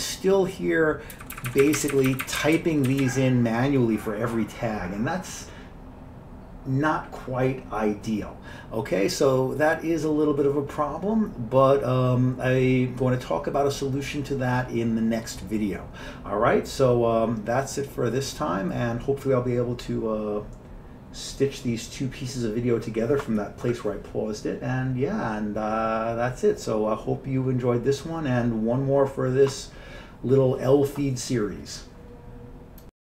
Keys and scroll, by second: 1.2 Up, 1.5 Up, 1.6 Up, 1.7 Up, 1.9 Up, 2.2 Up, 2.4 Up, 2.5 Up, 2.7-3.1 Down, 3.0 Down.